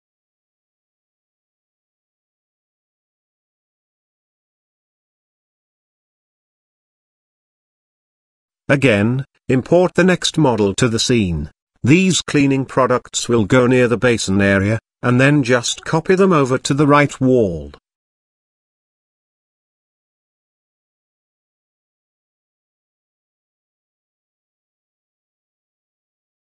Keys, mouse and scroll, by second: 1.9 click, 8.8 KP_3, 11.1 ctrl+v, 12.4 g, 14.2 KP_Decimal, 14.7-15.7 scroll up 1, 15.7 scroll up 1, 16.2 KP_7, 18.3 scroll up 1, 18.3-19.2 middle drag, 19.7 KP_7, 20.5 z, 21.4 r, 23.2 shift+middle drag, 23.9 g.